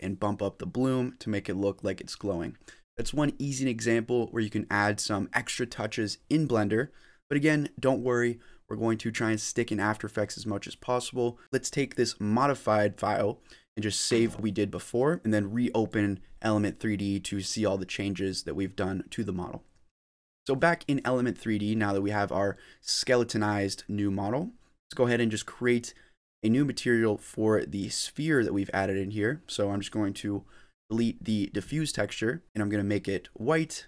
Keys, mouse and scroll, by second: 0.1 click, 1.5 click, 4.3 click, 5.2 click, 6.9 click, 7.1 scroll up 1, 7.3 middle click, 9.2 scroll down 4, 9.5 middle click, 10.4-10.8 scroll up 4, 10.8 middle click, 13.1 click.